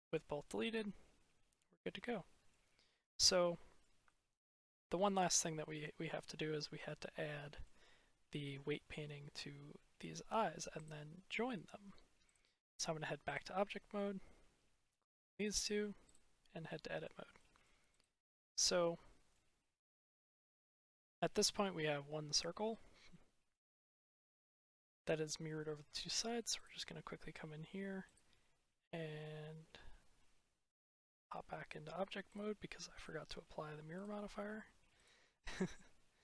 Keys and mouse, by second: 0.3-2.1 drag, 2.1 middle click, 3.3 middle click, 4.0-4.5 shift+middle drag, 4.7 middle click, 5.2 middle click, 5.4 click, 6.7 middle click, 6.8 click, 10.6-12.2 drag, 15.5-16.0 drag, 16.6 middle click, 17.3 middle drag, 18.2-19.2 middle drag, 20.8 click, 21.4-21.7 middle drag, 23.0-23.4 middle drag, 26.5-30.0 drag, 30.7 click, 32.1-32.9 drag, 33.9-34.9 drag.